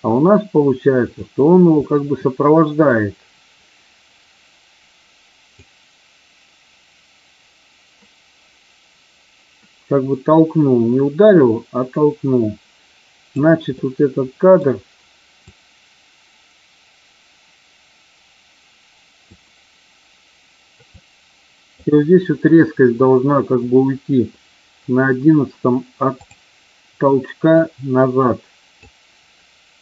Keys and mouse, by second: 1.7-2.7 middle drag, 5.6 click, 13.7 middle click, 15.4 click, 20.9 click, 27.5-28.7 drag.